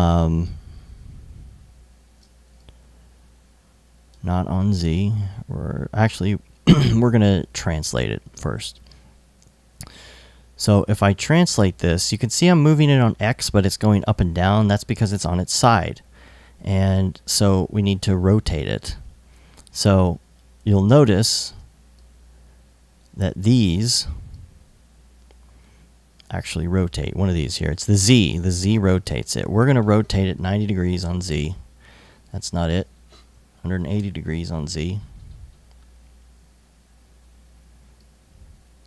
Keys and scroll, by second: 1.8 super+z, 3.9 super+z, 18.4 super+z, 21.1 super+z, 23.5 super+z, 28.8 super+z, 29.9 super+z, 30.3 super+9, 30.4 0, 30.5 Return, 33.0-33.9 typing.